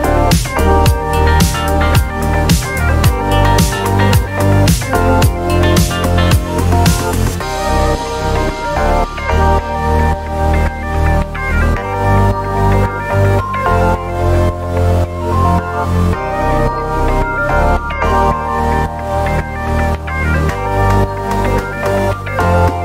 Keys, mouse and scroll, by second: 0.4-0.8 ctrl+scroll down 4, 1.1 ctrl+click, 2.2 ctrl+d, 3.4 click, 4.5-5.9 ctrl+shift+drag, 6.8 ctrl+d, 7.1-10.4 ctrl+drag, 11.4 shift+click, 12.8 ctrl+KP_Subtract, 15.0-20.7 drag, 21.4 click, 22.5 click.